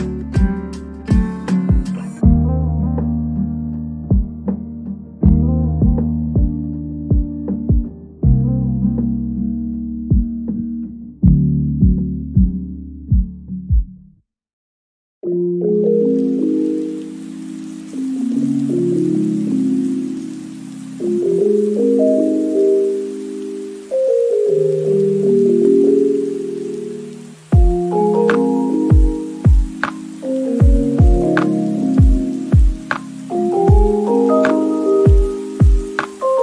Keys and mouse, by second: 0.0-1.8 typing, 0.7 ctrl+r, 1.4 click, 2.0 Tab, 2.3 shift+middle drag, 2.4 ctrl+s, 4.6 shift+Tab, 4.7 middle click, 5.3 KP_1, 5.3 z, 5.6 b, 6.0 p, 6.2 Tab, 6.9 shift+click, 7.0 Tab, 7.2 2, 7.4 KP_Decimal, 7.7 ctrl+z, 7.9 Tab, 8.0 ctrl+z, 8.1 ctrl+z, 8.9-13.5 typing, 8.9 Tab, 10.8 click, 12.1 Return, 13.2 click, 13.5 click, 14.2 click, 14.4 click, 15.0-16.0 typing, 16.0 Tab, 16.1 ctrl+s, 17.8 shift+middle drag, 18.0 shift+middle click, 18.1 shift+Tab, 18.4-23.4 typing, 19.0 click, 19.4 middle click, 19.8 Tab, 19.8 middle click, 20.0 shift+middle click, 21.5 middle click, 22.2 right click, 22.4 Tab, 22.5 right click, 22.8 Tab, 23.0 middle click, 23.5 right click, 23.8 middle click, 24.5 KP_1, 24.7 KP_3, 25.0 middle click, 25.7 middle click, 26.0 shift+click, 26.2 middle click, 26.7-34.4 typing, 26.9 shift+middle click, 28.2 shift+click, 28.8 shift+click, 29.3 Tab, 30.9 Tab, 31.0 Tab, 32.1 middle click, 33.7 click, 34.1 Tab, 34.2 Tab, 35.2 Tab, 35.4 Tab, 35.7 KP_1, 35.8 g, 35.9 z, 36.2 Tab, 36.2 click, 36.3 ctrl+s.